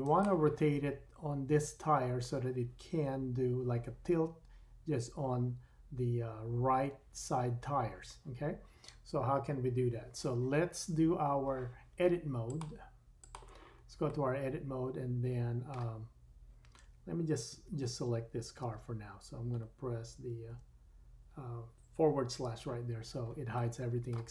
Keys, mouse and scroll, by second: 0.2-12.4 middle drag, 12.4-13.4 drag, 14.1 middle click, 14.1 click, 14.5-17.1 drag, 18.6 Tab, 18.6 click, 20.5 /, 23.5-24.3 drag, 23.5 middle click.